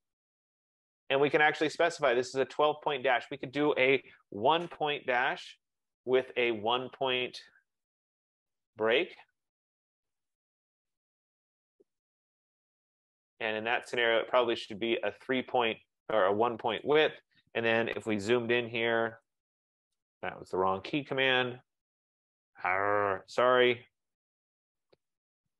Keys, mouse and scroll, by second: 0.8 click, 3.8 click, 4.6-6.7 typing, 6.1 Tab, 9.4-11.1 typing, 14.3 click, 15.1 click, 16.8 click, 19.4 super+=, 19.5 super+=.